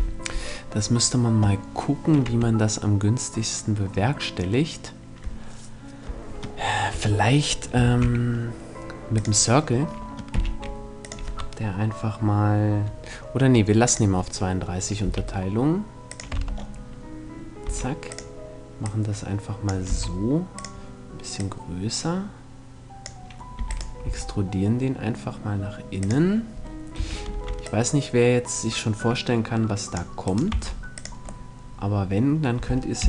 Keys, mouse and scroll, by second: 1.8 Tab, 6.4 Tab, 7.3 shift+a, 9.8 t, 10.5-12.4 drag, 14.6 s, 15.7 click, 16.0 Tab, 17.2 s, 19.4 s, 21.0-22.6 drag, 23.1 e, 23.3-25.0 right drag, 23.6 s, 25.6-27.4 drag, 26.5 a, 26.8 c, 29.9 right click, 30.0 x, 30.6 right click, 31.0-33.0 middle drag, 32.5 KP_3.